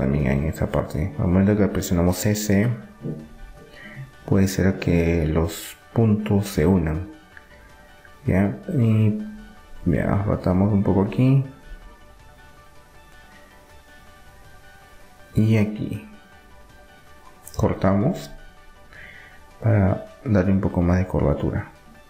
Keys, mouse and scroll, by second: 1.8 middle click, 2.7-5.5 drag, 5.2 s, 9.0 s, 13.2-16.2 drag, 16.2 ctrl+r, 19.5 g.